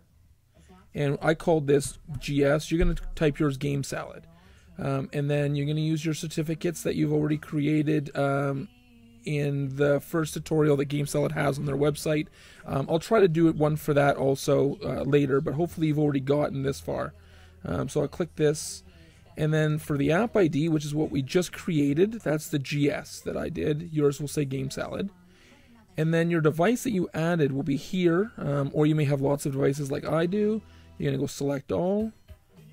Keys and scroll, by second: 1.7-2.0 typing.